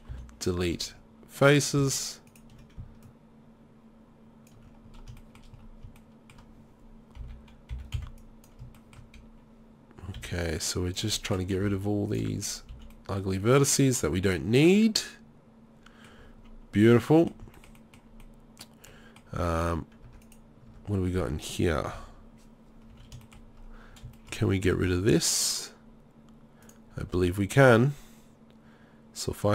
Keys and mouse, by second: 0.1 Delete, 3.0 middle click, 4.5 click, 7.2 n, 7.7 n, 7.9 b, 10.2 b, 11.6 Delete, 12.7 z, 15.1 middle click, 15.3 middle click, 15.5 middle click, 15.7 middle click, 20.1 Tab, 20.7 Tab, 21.9 KP_3, 22.9 z, 24.8 ctrl+r.